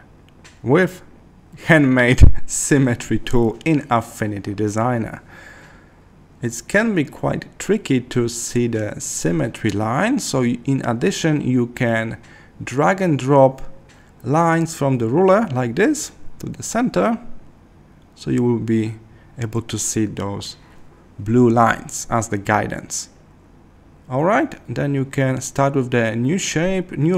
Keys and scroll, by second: 3.2 super+z, 10.8 Escape.